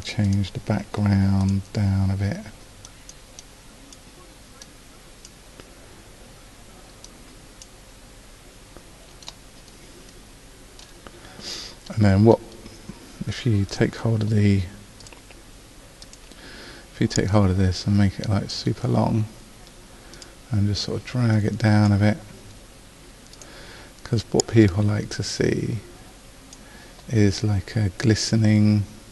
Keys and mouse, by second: 16.2-17.8 drag.